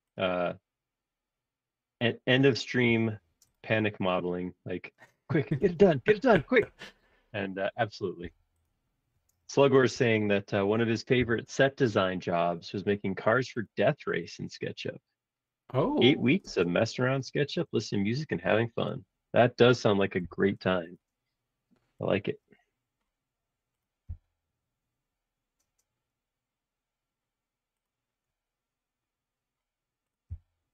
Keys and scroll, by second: 3.0 m, 5.7 space, 8.2 m, 9.9 q, 11.2 Left, 12.6 Home, 13.0 Right, 13.6 ↻, 16.4 space, 17.0 Escape, 17.2 space, 20.2 m, 24.2 Up, 30.2 Up.